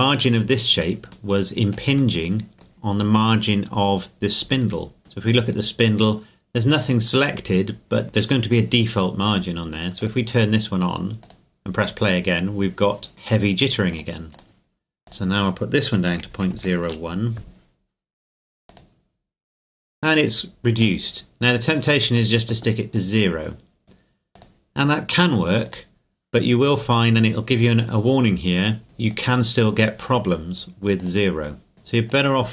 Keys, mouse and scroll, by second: 2.2 middle click, 5.0 middle click, 5.5 right click, 10.0 click, 13.9 click, 16.1 KP_Decimal, 16.3 KP_0, 16.5 KP_1, 16.7 KP_Enter, 18.7 click, 25.7 right click, 29.1 click.